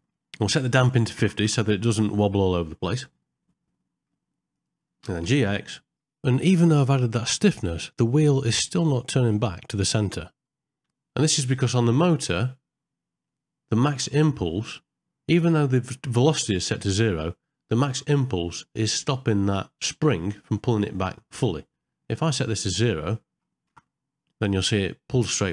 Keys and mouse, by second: 4.5 click, 12.0 click, 13.3 middle click, 22.7-23.7 drag.